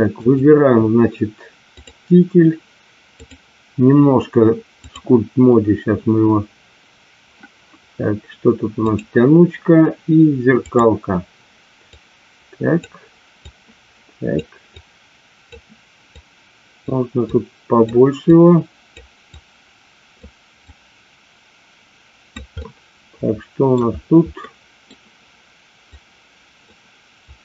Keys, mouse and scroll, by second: 0.2 click, 1.7 click, 3.2-5.1 drag, 8.9 click, 10.7 click, 11.9 click, 13.4 click, 14.7 click, 16.2 click, 17.2 click, 18.3 click, 19.2-20.2 drag, 20.7-22.4 drag, 22.6-23.7 middle drag, 24.4 middle click, 25.9 click, 27.3 click.